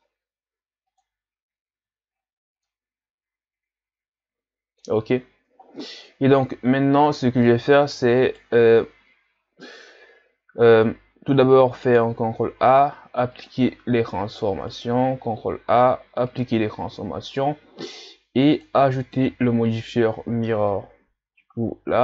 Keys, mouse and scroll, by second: 1.8 a, 2.1 scroll down 1, 2.7-5.1 middle drag, 5.1-6.0 scroll down 5, 6.0-6.6 scroll up 1, 6.6-7.9 scroll up 7, 7.9-8.2 scroll up 1, 8.2 right click, 12.4 ctrl+a, 14.7 right click, 15.7 ctrl+a, 18.5-22.0 drag.